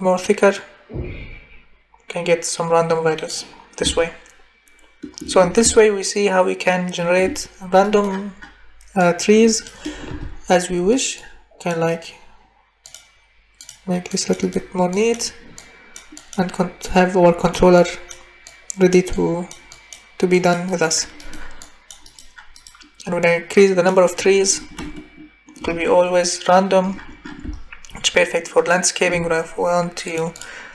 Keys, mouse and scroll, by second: 10.1 Delete, 17.8 click, 18.5 click, 19.3 click, 19.7 click, 20.4 click, 20.6 scroll up 1.